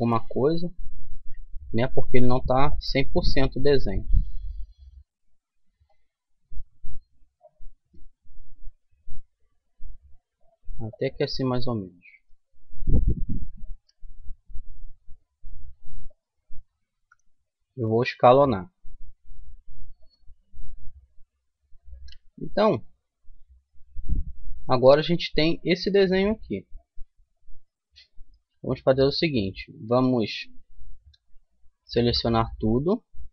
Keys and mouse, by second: 1.1 ctrl+r, 6.5-8.3 right drag, 7.8 g, 12.1-14.5 right drag, 13.7 e, 16.9 s, 20.7-23.1 middle drag, 23.1 Tab, 24.2-25.7 middle drag, 27.7 middle click, 28.5 Tab, 29.4-32.9 middle drag, 32.0 a, 32.9 a.